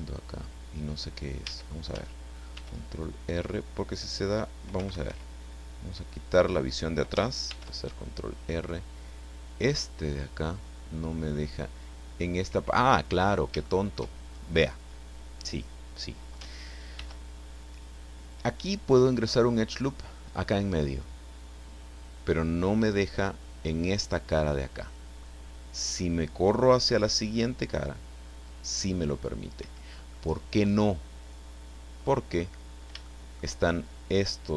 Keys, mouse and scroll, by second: 1.4 a, 2.5 ctrl+r, 4.8 Escape, 6.3 click, 7.5 ctrl+r, 12.7 Escape, 13.2 scroll up 1, 13.6 shift+middle click, 17.0 ctrl+r, 29.6 Escape, 30.1-32.5 middle drag, 33.1 shift+middle click.